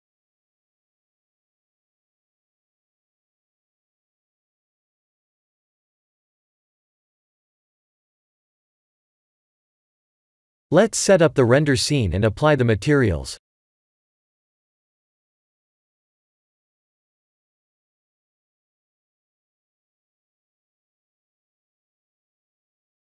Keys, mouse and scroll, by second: 0.9 scroll up 2, 2.3-3.1 scroll down 1, 3.1 Tab, 3.1 scroll down 2, 3.5 click, 3.9 Tab, 4.2 click, 4.6 Tab, 5.1-6.0 scroll up 5, 6.0-7.1 scroll down 2, 7.1 scroll down 5, 7.8 Tab, 8.4 click, 9.0 shift+middle click, 9.5 middle click, 9.6 middle click, 10.9 KP_1, 13.0 click, 13.8 click, 14.6 click, 15.6 ctrl+s, 15.9 click, 16.4 g, 19.1 click, 19.5 Tab, 20.0-20.7 scroll up 1, 20.7 scroll down 2, 20.7-22.1 scroll down 2, 22.1 Tab.